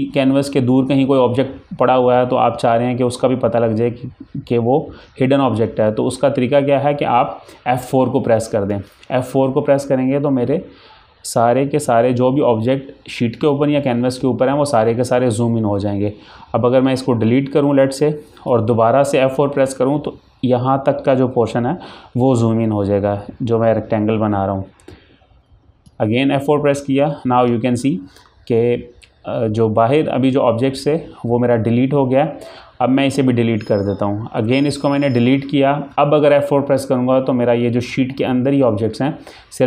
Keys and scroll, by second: 8.9 F4, 18.2 Delete, 25.6 F4, 34.6 F4, 34.8 Delete.